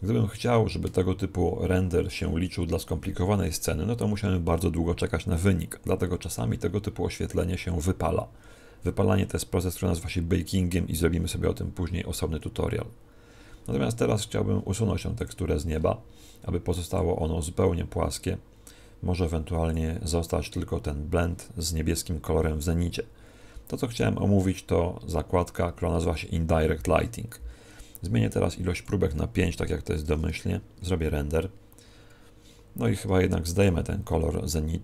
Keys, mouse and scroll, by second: 15.1 click, 15.7-16.7 scroll up 3, 17.1 click, 17.1-17.4 scroll up 2, 19.6 click, 28.7 click.